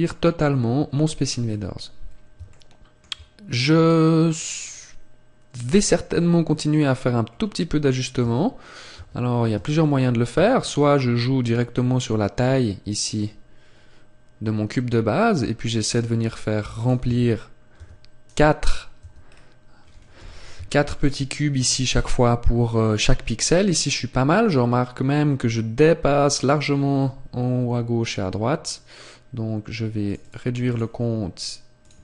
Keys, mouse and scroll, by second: 1.2 scroll up 1, 2.5 shift+middle click, 2.5-2.8 scroll up 1, 8.1 Tab, 10.3 s, 16.8 click, 17.0 Tab, 18.2 right click, 18.9 Tab, 19.2-20.1 scroll down 1, 20.1-20.5 scroll down 1, 20.1 z, 20.6 shift+middle click, 21.5 z, 30.0-32.0 click.